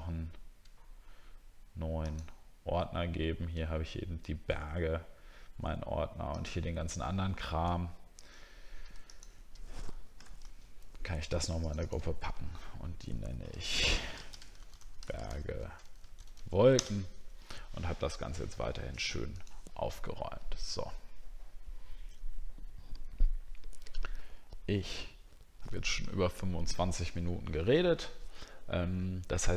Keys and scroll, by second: 10.4 ctrl+g, 14.3 shift+b, 15.2 shift+7, 15.6 w.